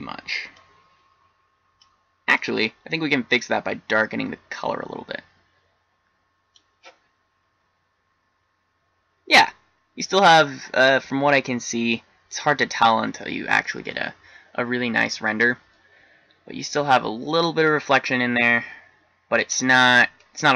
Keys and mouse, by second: 1.1 click.